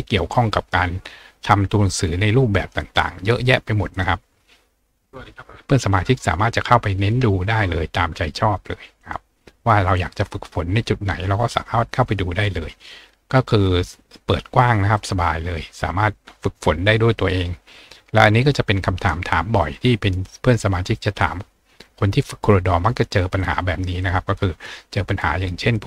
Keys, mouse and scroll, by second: 1.0-1.5 scroll down 2, 1.6-2.2 scroll down 2, 2.4 scroll down 2, 5.0-6.0 scroll down 5, 17.1 scroll down 1, 21.2 click, 23.4 click, 24.0 click.